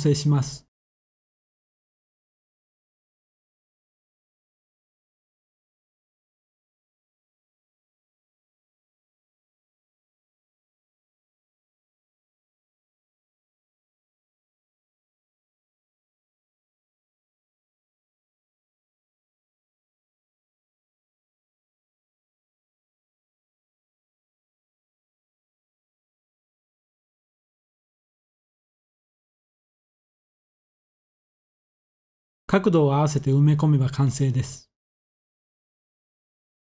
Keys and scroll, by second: 1.3-1.7 typing, 2.9 s, 11.1-13.0 typing, 18.9 typing, 21.6 r, 22.3 x, 23.4 Escape, 23.9-24.5 typing, 27.1 1, 30.1-30.7 typing, 32.1-32.8 typing, 36.3 s.